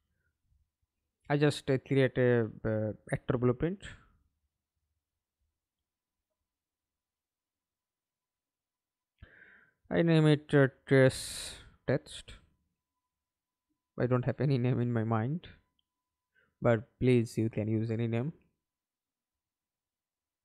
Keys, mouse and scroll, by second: 0.1 ctrl+space, 3.1 Delete, 3.8 middle click, 4.3 ctrl+space, 5.6 right click, 9.6-12.8 typing, 13.1 Return, 14.5 double click, 19.8-20.4 typing.